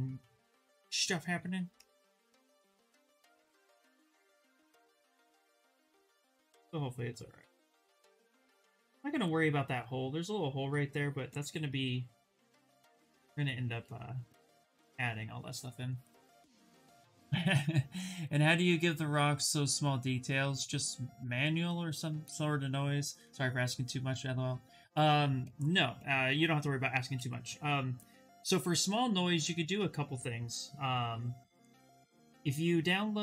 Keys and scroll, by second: 0.4 2, 3.5 shift+f, 26.2 s, 29.0 s.